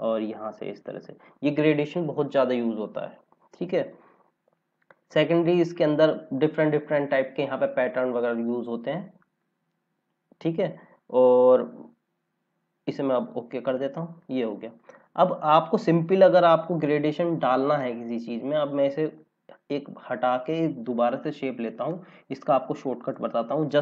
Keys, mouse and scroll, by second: 0.8 click, 12.8 click, 16.8 click, 20.1 Delete, 21.1 click.